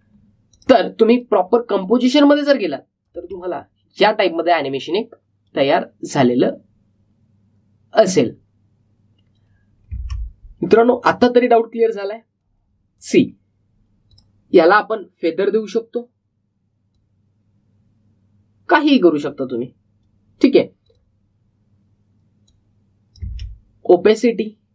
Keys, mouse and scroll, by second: 4.1 space, 10.8 space, 13.9 click, 17.9-24.2 drag, 24.2 space.